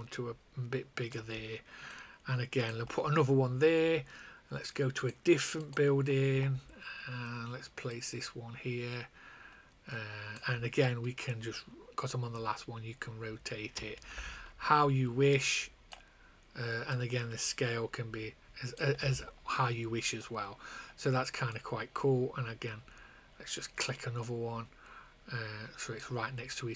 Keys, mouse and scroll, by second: 2.0 click, 8.1 click, 9.4 click, 11.5 click, 16.8 click, 21.4 click.